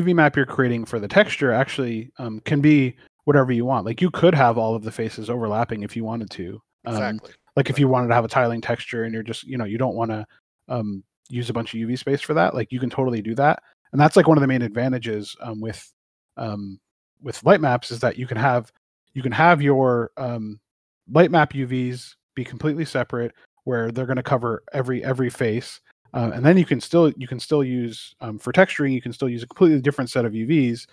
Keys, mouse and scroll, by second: 9.9 click, 12.6 scroll down 1, 13.6 click, 14.5 middle click, 15.9 scroll down 1, 17.3 scroll up 1, 18.6 middle click, 20.7 scroll up 1, 22.2 middle click.